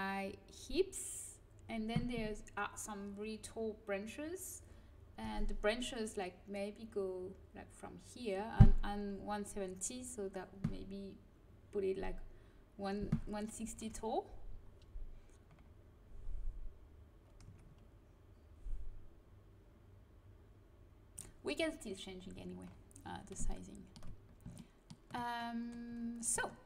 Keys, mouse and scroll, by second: 15.5-17.4 middle drag, 17.4 Tab.